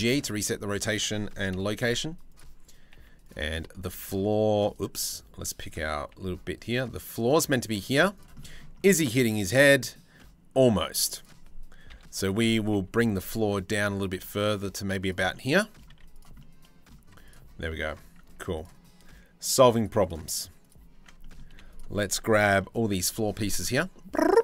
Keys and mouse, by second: 0.0 click, 1.1 KP_3, 1.5 z, 2.5 z, 3.2 g, 5.7 g, 7.1 click, 7.5 z, 8.0 click, 8.6 click, 9.8-10.1 drag, 10.5 z, 11.5 KP_3, 12.1 g, 14.9 click, 15.5 z, 17.3 Tab, 17.9 Tab, 20.5 Tab, 21.1 3, 22.7 c.